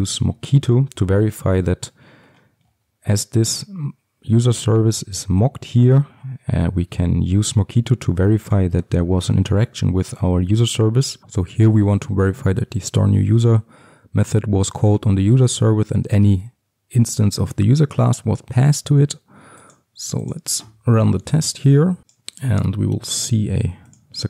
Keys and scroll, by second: 0.3 Tab, 0.4 Return, 10.9 Return.